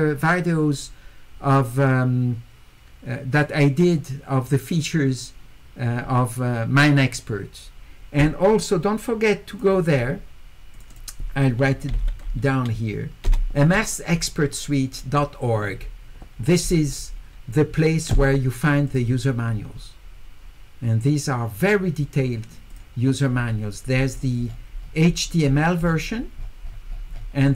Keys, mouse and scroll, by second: 9.5 click, 10.7 click, 10.9 click, 11.9 s, 12.1-13.1 scroll down 1, 18.9 click, 22.7 click, 24.1 middle click, 24.1-26.2 scroll up 7, 24.5 middle click, 24.8 middle click, 25.1 middle click, 25.5 middle click, 26.4 middle click.